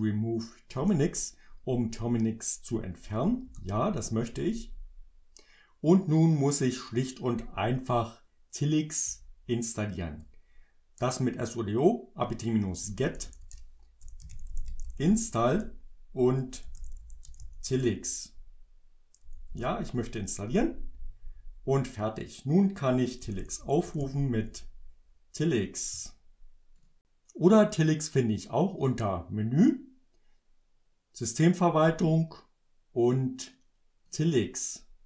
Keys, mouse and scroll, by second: 0.8 Return, 3.1 j, 3.5 Return, 9.1 Up, 10.2 BackSpace, 12.7 BackSpace, 13.8-17.9 typing, 19.2 j, 19.5 Return, 23.0-24.5 typing, 26.8 click, 28.9 click, 33.4 click, 34.1 click.